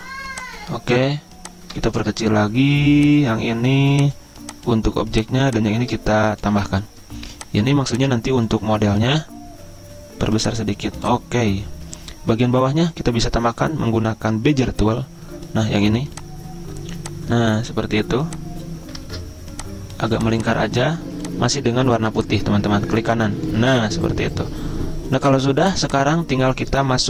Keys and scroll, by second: 19.2 ctrl+z.